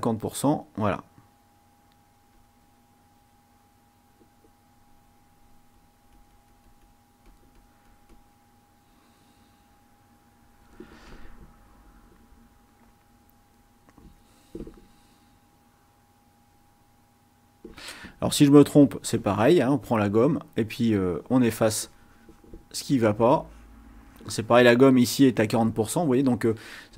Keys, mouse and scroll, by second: 0.2 click, 0.9 click, 2.3 click, 3.4 click, 5.1 click, 5.6-8.4 drag, 9.0 click, 12.6 click, 13.4-14.7 drag, 15.1-16.1 drag, 18.8 click, 20.0-22.7 drag, 22.8-23.8 drag, 24.1 click, 26.2 click.